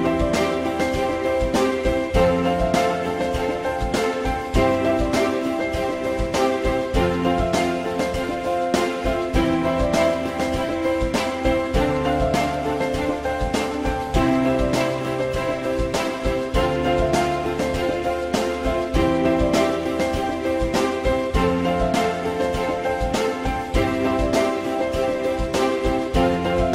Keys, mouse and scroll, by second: 2.3 alt+middle click, 6.6 alt+middle click, 7.5 alt+middle click, 14.6 alt+middle click, 20.5 z, 21.4 F4, 21.9 alt+middle click.